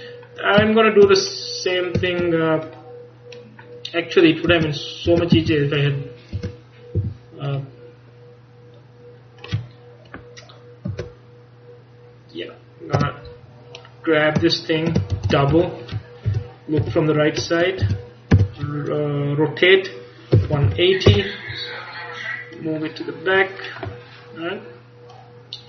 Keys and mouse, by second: 2.2-4.3 right drag, 4.3 middle click, 4.6 Tab, 5.2 Tab, 5.4 a, 5.9 right click, 6.4 Tab, 7.1 right click, 7.1 a, 11.1 ctrl+KP_Add, 11.6-13.7 ctrl+KP_Add, 15.2 shift+d, 16.4 KP_3, 16.9 KP_1, 17.9 z, 18.4 r, 22.6-25.6 drag.